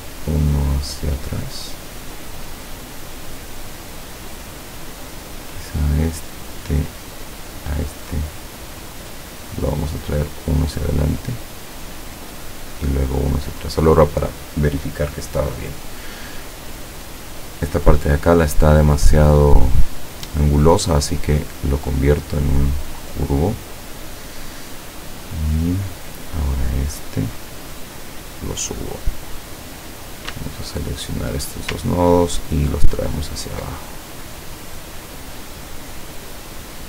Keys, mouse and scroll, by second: 1.1 click, 1.6-2.2 scroll up 1, 2.5-3.1 scroll down 4, 4.3 click, 6.1-6.5 scroll down 2, 6.8 click, 7.4 click, 8.1-8.5 scroll down 1, 8.5 scroll up 1, 10.3 click, 13.6 click, 18.1 click, 18.8 click, 19.3 click, 19.7 click, 20.3 click, 21.6 click, 26.4 click, 27.0-28.8 drag, 29.7 click, 30.7 shift+click, 32.1-33.8 ctrl+drag.